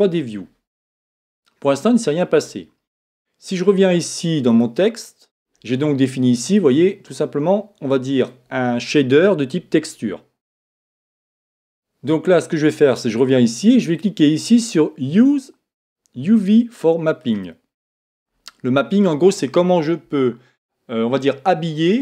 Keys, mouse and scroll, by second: 4.5-8.4 drag, 12.6 click, 17.2 click.